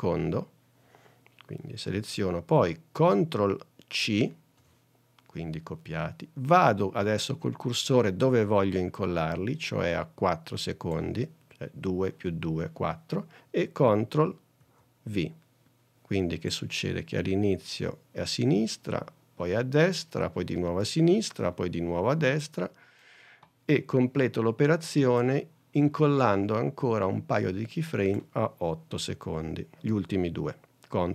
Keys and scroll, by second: 14.7 super+v.